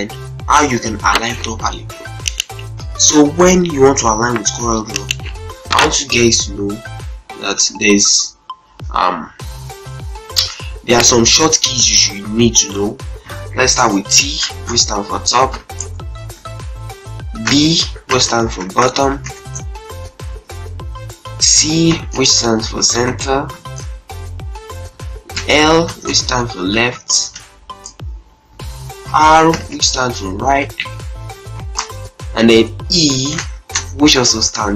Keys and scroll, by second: 2.6 F8, 7.6 Caps_Lock, 13.2-15.1 typing, 15.4 Return, 17.2-19.3 typing, 21.3-23.2 typing, 23.4 Return, 24.7-27.0 typing, 27.2 Return, 28.8-33.3 typing, 31.4 Return.